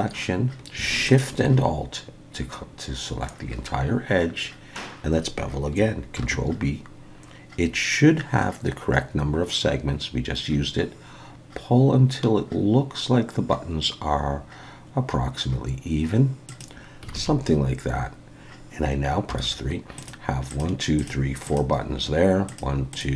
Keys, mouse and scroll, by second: 1.1 alt+shift+click, 6.2 ctrl+b, 17.1 alt+a, 19.3 3, 20.0 click, 20.5 click, 21.0 click, 21.5 click, 22.5 click, 22.9 click.